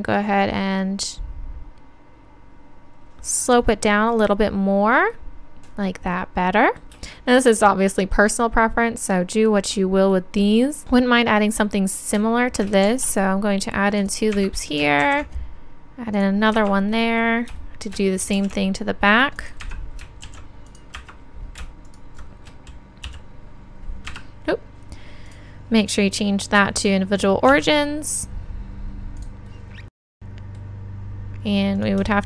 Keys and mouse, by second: 3.5-5.3 drag, 5.3-12.9 middle drag, 12.9 ctrl+r, 18.2 middle click, 18.4 ctrl+r, 21.9-29.2 drag, 23.0 s, 29.2 s, 29.2-31.1 drag, 31.1 middle click, 31.8-32.2 drag.